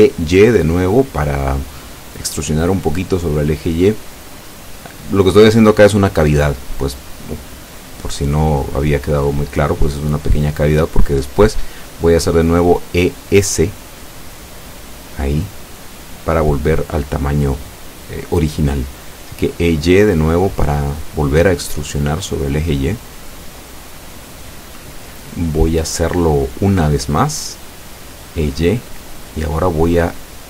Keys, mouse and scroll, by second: 3.6 click, 4.2 middle click, 6.8 e, 7.6 y, 20.3 click, 21.4 e, 21.6 s, 24.7 click, 26.8 e, 27.3 y.